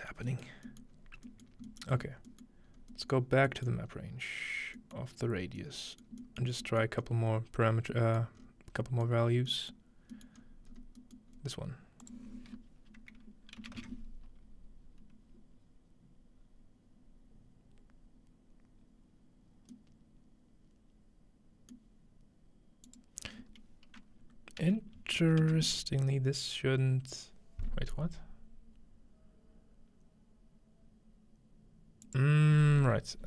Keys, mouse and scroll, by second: 0.5 middle click, 0.5-0.9 scroll down 1, 0.8-1.4 middle drag, 0.9-1.4 scroll up 2, 1.5 middle click, 1.8-2.3 middle drag, 2.0 scroll up 1, 2.5-3.0 middle drag, 2.7-3.2 scroll up 2, 3.1-3.5 middle drag, 3.2-3.9 scroll down 2, 3.7-4.8 middle drag, 3.9 scroll up 2, 5.0 middle click, 5.2-6.8 scroll down 2, 6.9-7.4 scroll up 2, 7.4 scroll down 2, 8.3 scroll up 2, 9.2 scroll down 2, 9.8 middle click, 10.4-10.8 scroll up 2, 10.5 middle click, 10.8 middle click, 11.2 middle click, 11.3 scroll up 1, 11.4 middle click, 12.0-13.3 drag, 12.0-13.3 scroll up 1, 16.4-17.4 scroll down 2, 17.4-19.0 scroll down 1, 19.7 middle click, 21.9-24.0 middle drag, 22.9-24.0 drag, 32.0 click.